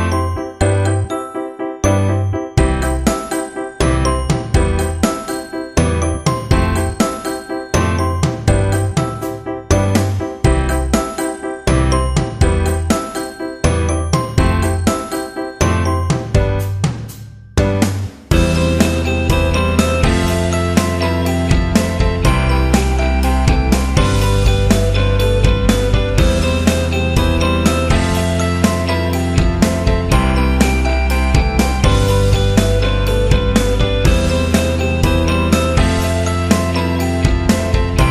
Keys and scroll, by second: 1.4 Return, 2.9 v, 5.1 ctrl+t, 23.3 Return, 24.9 ctrl+j, 28.1 Delete, 29.5 ctrl+t, 32.9 Return, 34.4 v, 36.4 ctrl+e, 36.9 v.